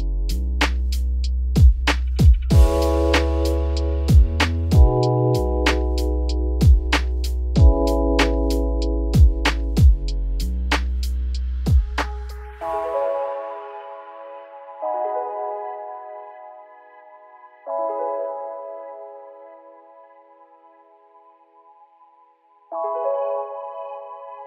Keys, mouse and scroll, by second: 1.5-1.9 scroll down 6, 1.9 shift+middle click, 2.2 scroll up 2, 3.9 shift+d, 9.9 shift+d, 15.3 p, 15.8 Tab, 16.0-17.4 middle drag, 17.4 scroll up 2, 17.6-18.5 shift+middle drag, 18.5 click, 18.7 scroll down 2, 18.9-20.2 middle drag, 20.2 click, 20.5 scroll down 4, 20.7 middle drag, 21.0 Tab, 21.9 a, 22.2 scroll up 2, 22.4 s.